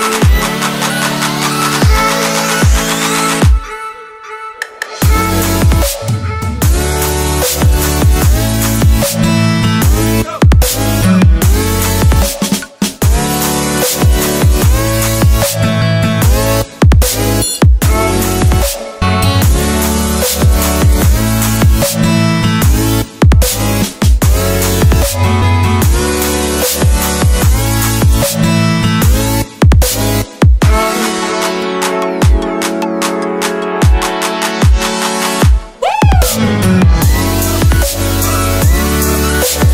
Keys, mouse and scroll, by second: 0.5 ctrl+v, 1.0 click, 1.1 Return, 1.4 BackSpace, 1.6 Left, 1.7 Return, 3.6 click, 7.5 click, 15.2 click, 16.7 ctrl+Num_Lock, 18.0 click, 24.5 click, 31.9 click.